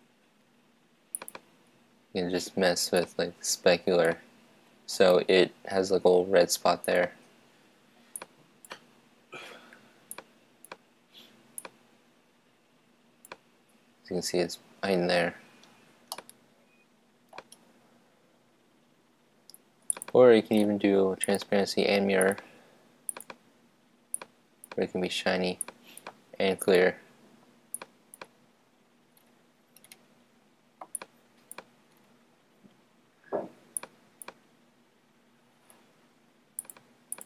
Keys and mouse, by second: 1.1-3.1 drag, 6.9-13.4 drag, 16.1-18.1 middle drag, 20.1-21.4 drag, 23.5 click, 24.0-29.6 drag, 31.1-32.8 drag, 33.9 click.